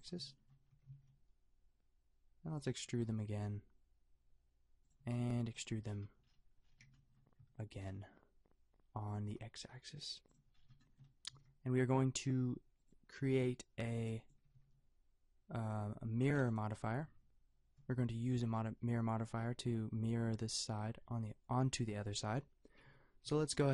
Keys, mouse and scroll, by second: 0.7 g, 3.0 e, 5.0 a, 5.2 b, 9.3 e, 11.3-12.7 drag, 11.3 g, 13.3 a, 13.9 b, 14.5 g, 16.1 a, 16.4 Tab, 17.0 Tab, 22.9 Tab, 23.3 Tab.